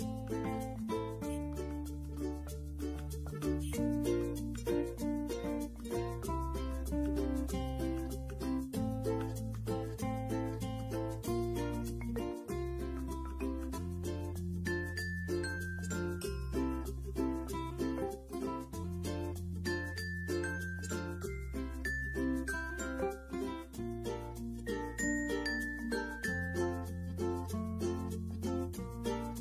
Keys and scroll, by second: 14.0 alt+space.